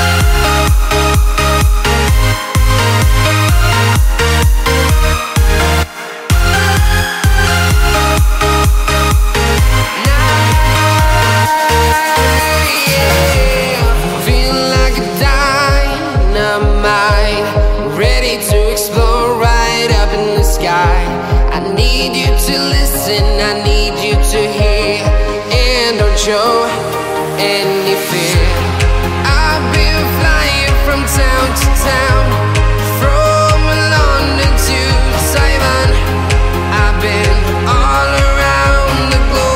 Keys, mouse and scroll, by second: 0.0 ctrl+alt+r, 0.3 scroll down 1, 0.6 right click, 1.0-1.5 scroll down 1, 1.5-3.1 right drag, 3.1 click, 4.7 click, 7.3 click, 8.4 click, 12.2-12.7 scroll down 1, 12.9-19.3 drag, 19.3-20.8 drag, 22.5-25.0 drag, 26.2-27.9 drag, 28.6 click, 29.9 click, 32.5-33.5 scroll up 1, 33.5 click, 34.5 right click, 35.3 click, 36.7-37.1 scroll up 1, 37.7 click, 38.0 right click, 39.1 click.